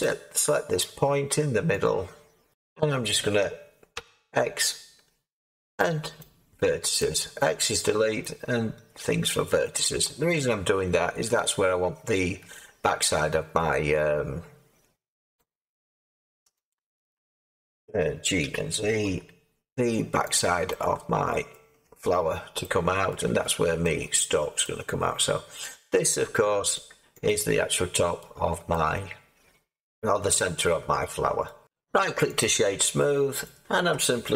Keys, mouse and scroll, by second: 3.9 x, 7.7-15.1 middle drag, 15.3 alt+click, 16.6 alt+click, 18.4-21.5 alt+drag, 18.4 g, 19.0 z, 21.5 middle click, 21.8 Tab, 23.1-25.1 middle drag, 25.1-26.7 scroll up 2, 26.7-27.2 scroll down 1, 27.2-30.3 drag, 30.3-31.6 middle drag, 31.6 right click, 32.3-33.4 drag, 33.4-34.3 middle drag.